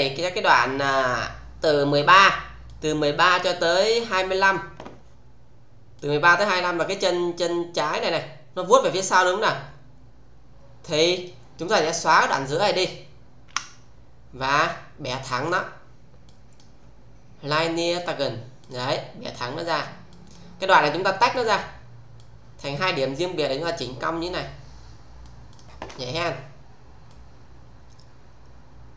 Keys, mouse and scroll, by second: 5.9-6.9 click, 8.6-11.4 click, 13.4 Delete, 14.4 click, 17.9 click, 20.1 click, 21.3 click, 23.1-25.3 middle click, 25.5 click, 27.0-28.9 click.